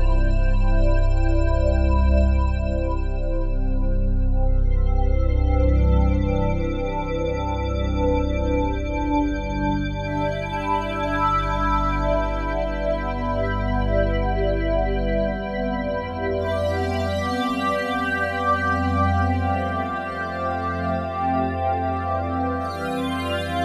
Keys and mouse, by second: 3.9 click, 5.2 click, 6.0 click, 7.1 click, 9.9-19.8 alt+shift+drag, 21.2 a, 22.1 alt+r, 22.4 alt+g, 23.4-23.6 drag.